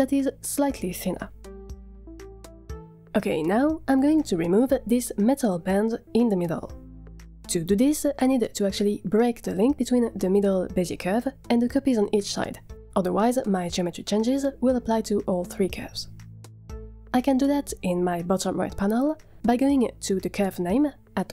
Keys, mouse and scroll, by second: 0.0-1.8 drag, 2.8 middle click, 2.9 click, 3.3 Tab, 3.9 click, 8.8 Tab, 9.5 drag, 9.8 g, 16.0 scroll up 1, 16.2-16.7 middle drag, 16.9 Tab, 19.7 scroll up 2.